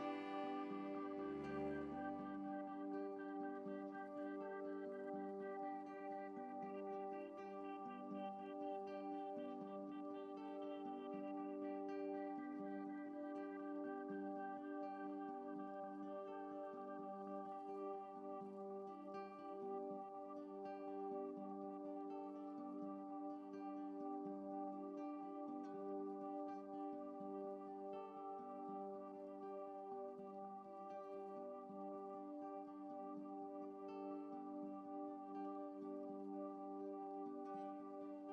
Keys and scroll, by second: 5.5 ctrl+i, 7.8 ctrl+z.